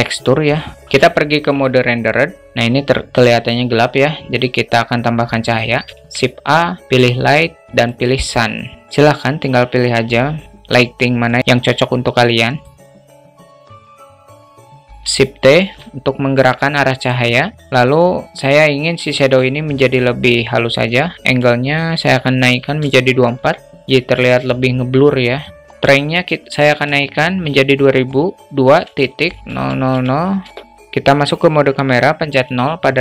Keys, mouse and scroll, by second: 5.4 shift+a, 8.8 ctrl+z, 12.3-13.6 drag, 14.3 alt+middle drag, 14.5 alt+shift+middle drag, 15.1 shift+t, 21.4-23.0 drag, 25.0 middle click, 25.7-30.2 drag, 32.0 KP_0.